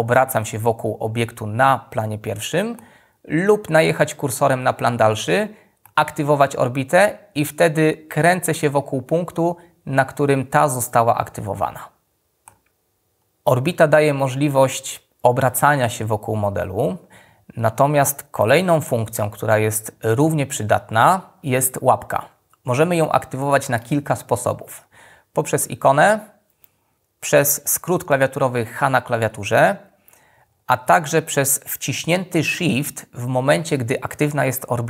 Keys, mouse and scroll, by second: 28.7 h.